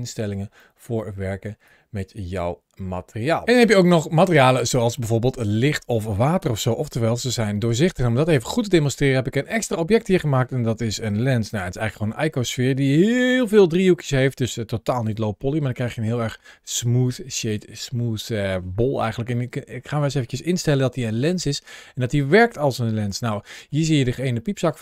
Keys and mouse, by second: 0.6 middle click, 1.5 click, 4.8-6.4 middle drag, 6.6 g, 6.8 g, 7.5 click, 8.5-10.4 middle drag, 10.4 g, 10.8 click, 11.5 Tab, 13.0 shift+middle click, 13.9 middle click, 14.9 Tab, 15.7-16.1 middle drag, 17.9-18.6 middle drag, 19.8 middle click, 19.8 g, 20.6 r, 20.7 r, 22.8 click, 23.2 middle click, 24.0 middle click.